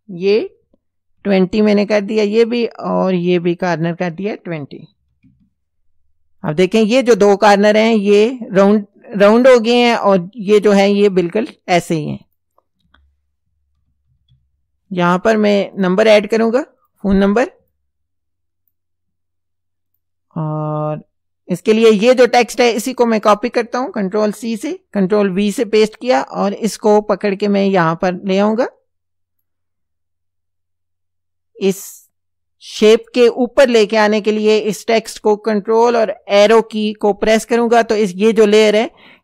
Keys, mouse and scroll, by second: 0.3 KP_2, 1.2 KP_0, 1.6 KP_Enter, 3.6 click, 4.8 KP_2, 5.0 KP_0, 5.2 KP_Enter, 6.4 click, 12.3 click, 13.8 shift+Left, 15.8 click, 16.8 click, 17.7-18.9 shift+drag, 19.9 click, 22.8 click, 24.4 ctrl+c, 25.0 ctrl+v, 27.0-29.6 drag, 36.3 ctrl+Up, 37.6 ctrl+Up.